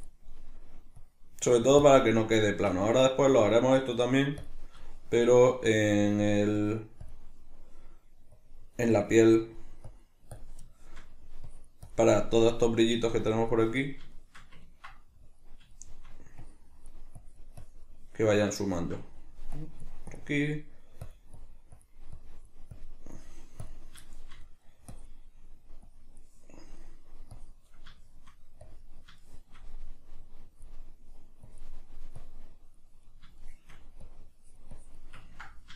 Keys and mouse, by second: 2.4-3.3 shift+middle drag, 3.3-4.9 drag, 4.9-5.8 shift+middle drag, 5.8-10.7 drag, 10.7-11.5 shift+middle drag, 11.5-13.8 drag, 13.8-15.3 middle drag, 15.3-15.7 drag, 15.7-16.4 shift+middle drag, 16.4-18.2 drag, 18.2-19.6 middle drag, 19.6-20.5 drag, 20.5-21.1 middle drag, 21.1-24.0 drag, 24.0-24.9 shift+middle drag, 24.9-26.6 drag, 26.6-27.3 middle drag, 27.3-28.0 drag, 28.0-28.6 shift+middle drag, 28.6-29.2 drag, 29.2-30.1 shift+middle drag, 30.1-33.1 drag, 33.1-34.1 middle drag, 34.1-35.3 drag, 35.3-35.7 ctrl+middle drag.